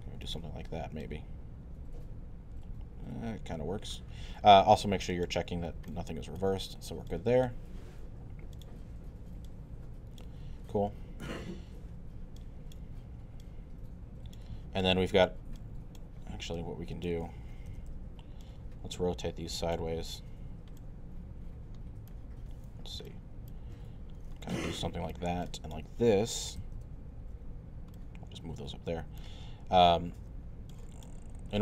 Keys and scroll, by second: 17.7 e, 19.8 w, 26.6 e, 27.2 w, 30.2 e.